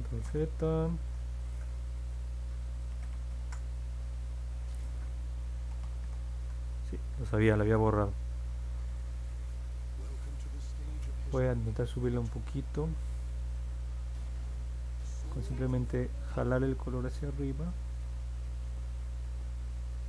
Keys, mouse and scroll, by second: 0.2 ctrl+z, 1.0 ctrl+z, 2.9 ctrl+z, 3.1 ctrl+z, 3.3 ctrl+z, 5.5 ctrl+z, 5.8 ctrl+z, 6.0 ctrl+z, 14.1 click, 14.6 click, 15.2 click, 15.7 click, 16.1 click, 16.5 click, 16.8 click, 17.2 click, 17.9 click, 18.2 click, 18.5 click, 18.8 click.